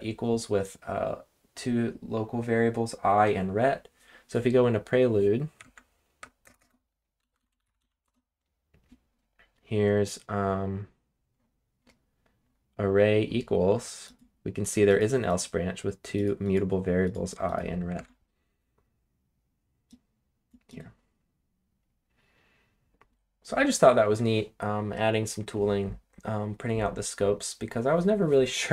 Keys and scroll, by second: 5.6 super+Tab, 6.6-8.3 typing, 18.0 super+Tab.